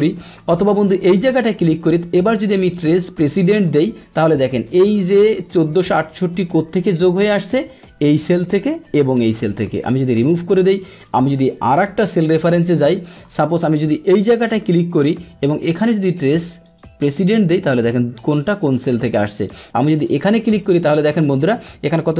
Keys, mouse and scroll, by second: 1.1 click, 3.2 click, 10.1 click, 12.0 ctrl+Page_Down, 12.6 ctrl+Page_Down, 12.8-14.4 middle drag, 14.4 click, 16.6 click, 19.4 click, 20.0 click.